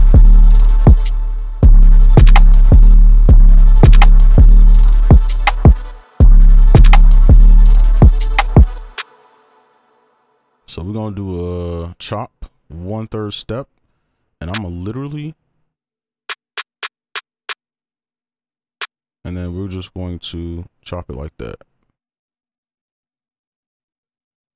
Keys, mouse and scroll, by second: 1.2 space, 1.6 space, 2.9 space, 3.2 space, 5.9 space, 6.2 space, 8.7 space, 13.6-14.0 scroll up 1, 14.0 right click, 16.5 double click, 19.1 ctrl+click, 20.2 right click, 22.4 ctrl+click.